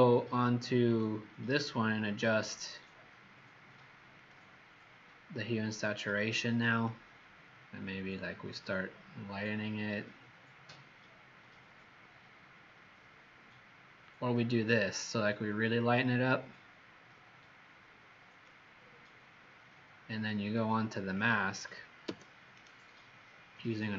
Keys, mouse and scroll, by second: 0.8 click, 21.1 click, 22.0 b, 22.5 right click.